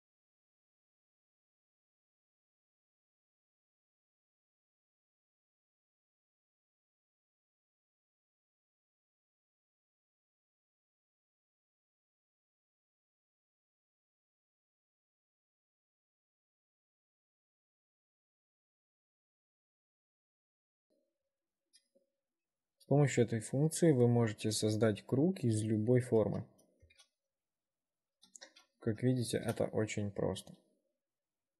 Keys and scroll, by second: 1.9 ctrl+z, 2.3 w, 3.0 shift+5, 6.1 shift+5, 7.2 r, 7.8 w, 8.4 ctrl+r, 10.1 w, 11.3 2, 13.1-15.0 typing, 18.1 r, 19.1 1, 22.2 w, 26.9 ctrl+r, 29.2 4.